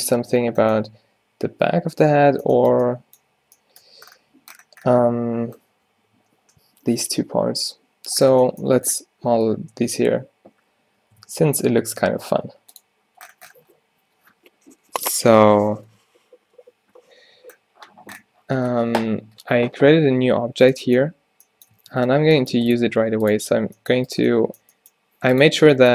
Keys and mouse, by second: 11.3 shift+a, 20.6 Tab, 21.2-23.7 typing, 24.7 g, 25.7 g.